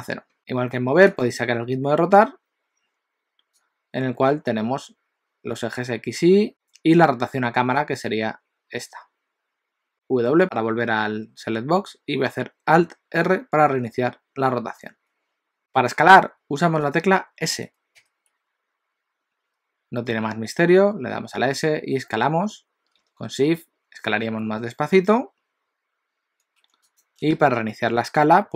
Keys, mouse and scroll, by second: 1.1 click, 3.8 click, 6.5 ctrl+z, 7.7 click, 9.9 w, 13.7 alt+r, 17.9 s.